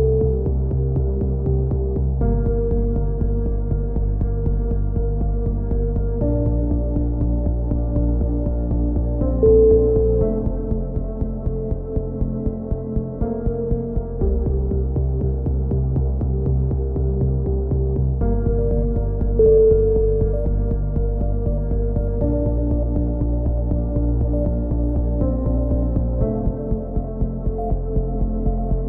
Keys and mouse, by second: 1.5-3.0 right drag, 2.7 x, 4.8 ctrl+z, 5.2-6.5 right drag, 6.3 alt+m, 7.7-9.1 right drag, 8.8 x, 10.5 a, 10.8 z, 11.0 middle click, 11.2 z, 11.9 click, 12.9 z, 14.4 right click, 15.2 middle click, 15.6 right click, 15.9 z, 16.3 middle click, 17.5 g, 22.8 click, 23.2 right click, 23.7 x, 26.0 a, 27.6 right click, 28.5 middle click.